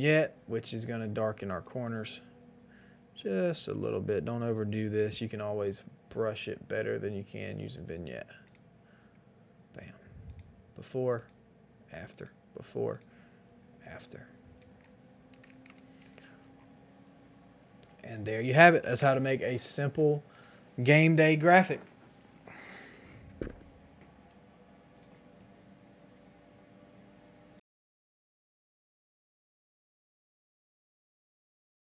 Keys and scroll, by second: 15.4 KP_1, 15.4 KP_0, 15.6 KP_0, 15.6 Return, 18.9 Return, 18.9 KP_5, 18.9 KP_0, 21.0 ctrl+s.